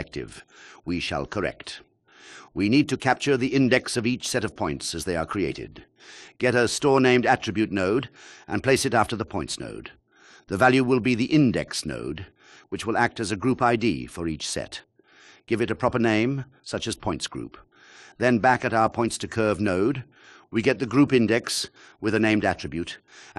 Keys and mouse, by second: 1.5 shift+a, 7.2 click, 8.2 shift+d, 10.6 click, 11.9-16.1 drag, 18.0 click.